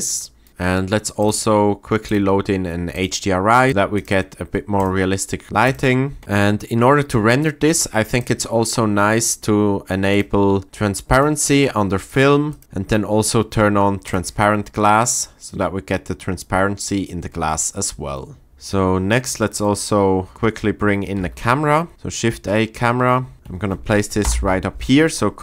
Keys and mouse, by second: 1.2 click, 2.2-3.0 drag, 8.2 click, 10.1 click, 12.0 click, 12.4 click, 14.0 click, 21.2 shift+a, 24.2 ctrl+alt+KP_0.